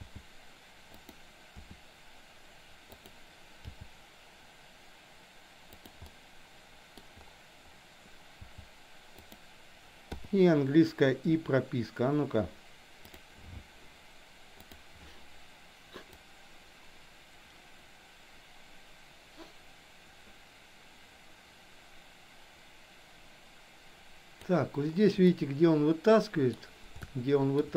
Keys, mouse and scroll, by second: 1.6 r, 3.6 g, 6.0 scroll up 1, 6.2 middle click, 6.8 scroll down 1, 8.5 g, 10.2 i, 16.2-24.5 drag, 25.2-26.5 middle drag, 27.0-27.6 shift+middle drag.